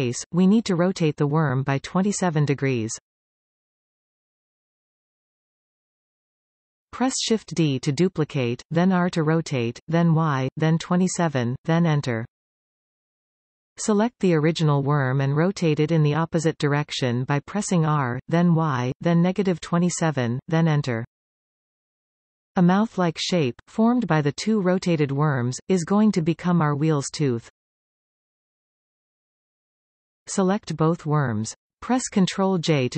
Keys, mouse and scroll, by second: 6.3 shift+d, 11.5 Return, 13.0 click, 17.0 r, 19.9 Return, 21.0 middle click, 22.0 middle click, 22.6-22.9 scroll up 1, 25.0-26.4 middle drag, 27.1 shift+middle click, 27.7-28.0 scroll up 1, 28.0-30.1 middle drag, 30.3 shift+click, 31.8 ctrl+j.